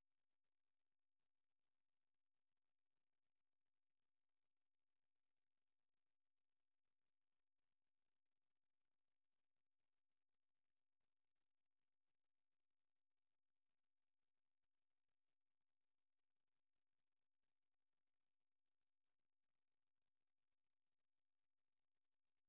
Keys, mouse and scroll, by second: 3.2 click, 4.4 Right, 9.6 Right, 10.9 Left, 12.7 click, 19.9 click.